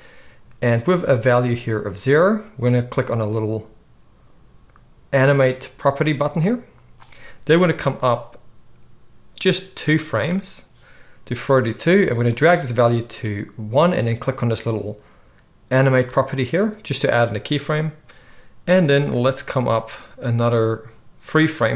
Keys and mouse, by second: 6.3-7.9 middle drag, 7.9-16.3 drag, 16.3-19.3 middle drag, 19.3-21.7 drag.